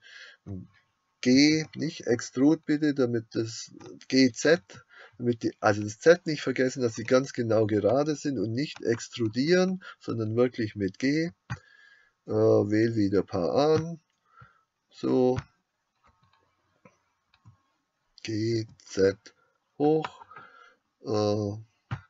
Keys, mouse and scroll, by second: 1.4 g, 11.8 shift+click, 17.4 g.